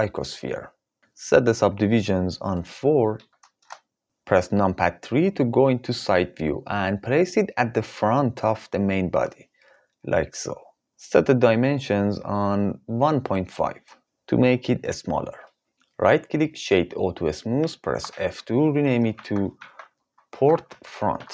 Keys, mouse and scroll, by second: 2.1-3.1 drag, 4.9 KP_3, 7.3 g, 13.0-15.2 drag, 16.6 right click, 18.2 F2.